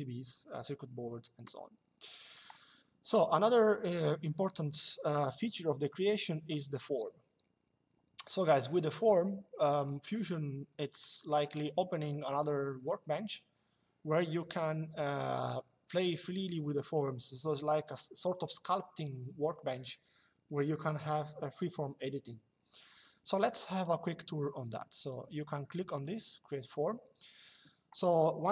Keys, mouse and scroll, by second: 25.6 click.